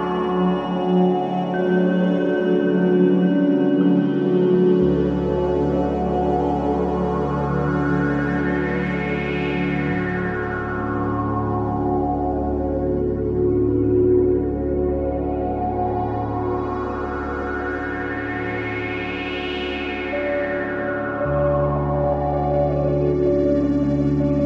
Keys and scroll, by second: 6.7 ctrl+shift+KP_7, 9.6 ctrl+shift+], 11.0 ctrl+z, 13.1 ctrl+shift+], 13.8 space, 14.8 c, 15.6 v, 22.1 c.